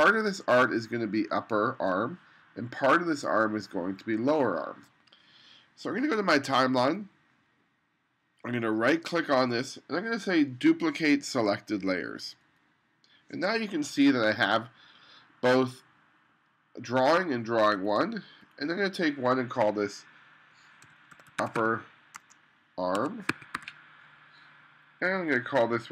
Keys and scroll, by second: 20.7-24.0 typing.